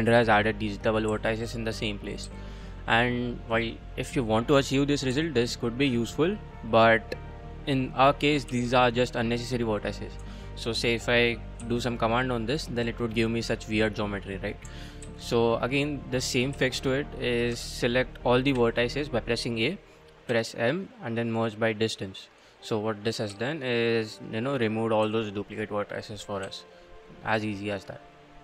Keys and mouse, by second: 0.5 click, 0.9 click, 1.1 g, 1.5 click, 2.0 click, 2.2 g, 4.1 click, 4.5 click, 5.1 g, 6.1 click, 8.3 click, 8.5 g, 9.1 click, 10.2 3, 10.6 click, 11.6 g, 12.2 click, 12.9 middle click, 13.1 click, 13.8 click, 15.0 ctrl+z, 16.5 a, 17.5 1, 18.5 a, 20.3 m, 23.0 click, 23.3 g, 24.3 click, 24.8 click, 25.0 g, 25.6 click, 26.2 click, 26.4 g, 27.5 click.